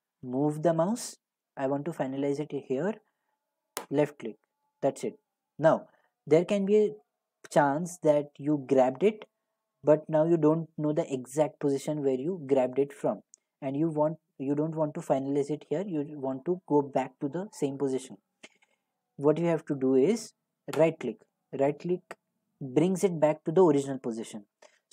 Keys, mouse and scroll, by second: 3.9 click, 8.3 g, 20.9-24.9 right drag.